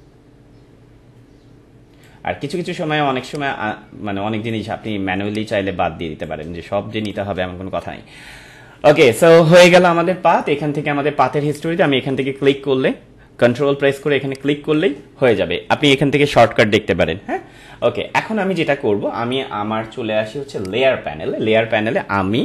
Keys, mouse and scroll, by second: 3.6-7.0 drag, 8.4 ctrl+-, 11.5 ctrl+click, 14.3 ctrl+click, 17.5 ctrl+click, 17.6 ctrl+-, 20.6 click.